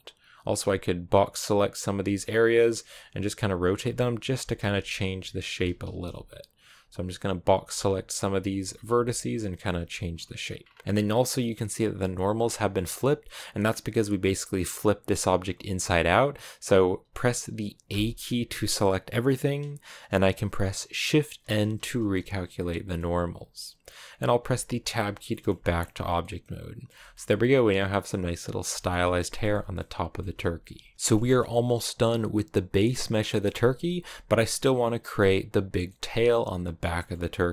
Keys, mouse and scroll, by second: 1.3 Left, 1.7-5.4 typing, 6.5-9.7 typing, 9.9-10.4 scroll down 4, 10.4-10.8 scroll up 2, 10.8 middle click, 11.3-12.3 scroll up 1, 12.3 middle click, 12.6 scroll down 2, 12.8 a, 13.1 a, 13.5-15.6 scroll up 1, 15.6 a, 17.7 a, 21.4 shift+n, 21.8-22.5 scroll down 2, 22.5 middle click, 23.1 scroll down 1, 23.4 middle click, 23.8-24.3 scroll down 1, 24.3 Tab, 24.7-25.1 scroll down 3, 24.8 a, 25.1 middle click, 25.8 scroll down 2, 26.0-37.5 middle drag.